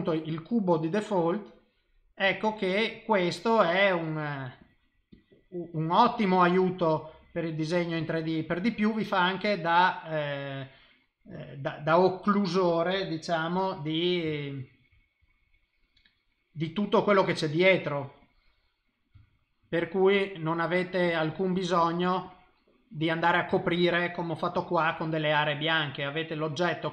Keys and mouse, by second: 0.0 middle click, 1.4 click, 2.3 click, 3.0 middle click, 4.1 click, 4.6 click, 5.1 click, 5.2 typing, 5.7 click, 6.1 click, 6.4 click, 6.8 click, 7.2 click, 8.0 click, 8.6 middle click, 9.9 middle click, 10.6 click, 11.0 middle click, 12.1 click, 12.5 click, 13.5 KP_7, 14.3 shift+middle click, 15.4 click, 17.1 click, 18.2 click, 19.1 shift+middle click, 20.1 click, 20.5 click, 20.8 click, 21.0 click, 21.3 click, 21.5 click, 21.8 click, 22.0 click, 22.3 click, 22.6 middle click, 23.6 shift+middle click, 24.6 middle click, 24.9 middle click, 25.2 l, 25.6 l.